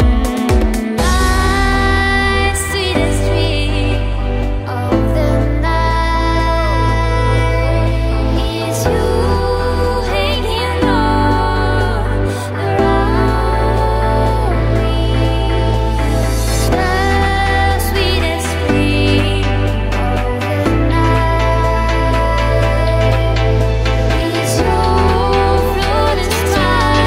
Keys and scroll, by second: 5.4 p, 6.9 Tab, 8.2 BackSpace, 9.7 super+z, 10.1 super+z, 12.9 Caps_Lock, 14.4-18.5 typing, 20.5 BackSpace, 20.7 a, 21.2 y, 22.9-23.8 typing.